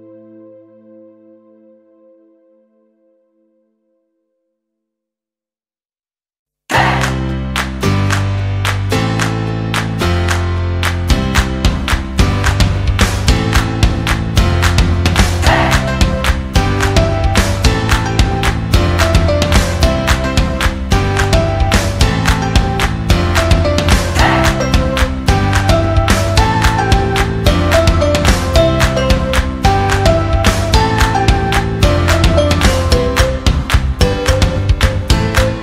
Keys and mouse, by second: 0.6 g, 2.0 alt+z, 2.6 KP_1, 3.2 alt+z, 3.6 Tab, 4.0-5.5 middle drag, 5.5 drag, 6.0 Tab, 6.4 a, 6.8 w, 9.7 middle click, 10.4 alt+s, 12.7 KP_1, 13.5 shift+middle click, 14.0 alt+z, 14.7 s, 16.0 alt+s, 17.5 alt+z, 17.8 KP_3, 18.6 shift+middle drag, 19.0 Tab, 19.5 Tab, 20.1 alt+z, 20.4-20.9 middle drag, 21.0 alt+z, 22.0 shift+right click, 22.4 KP_3, 23.2 alt+z, 23.7 g, 25.3 alt+z, 25.8 right click, 26.1 g, 27.9 middle click, 29.2-30.4 shift+right drag, 30.5 s, 32.0 g, 32.5 KP_3, 33.2 g, 33.9 alt+z, 35.0 c.